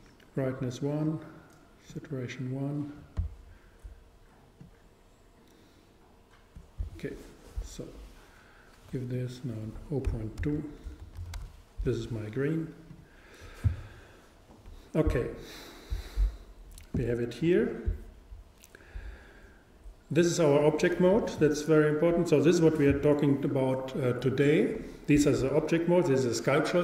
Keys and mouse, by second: 20.2-22.1 drag.